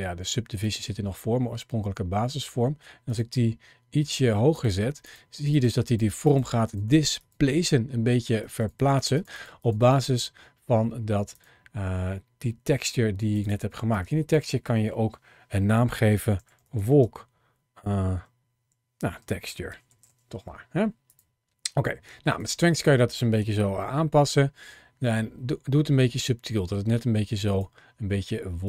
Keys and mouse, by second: 0.5 click, 2.9 click, 4.4 click, 4.9 click, 5.3 click, 5.7 click, 6.1 click, 6.5 click, 6.7 click, 7.0 click, 8.3 click, 9.4 click, 9.7 click, 11.2 click, 13.1-21.1 drag, 22.2-27.4 drag, 28.5-28.6 drag.